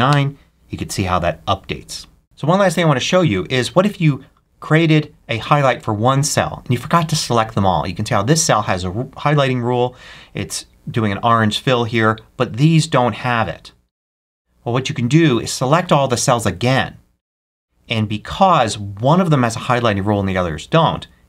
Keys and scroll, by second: 0.0 Return.